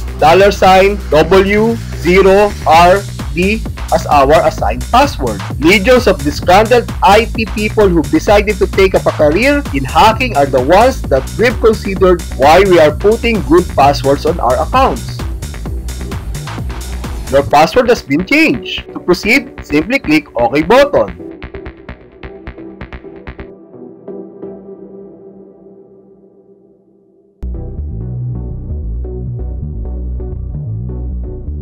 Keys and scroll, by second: 15.4 Return.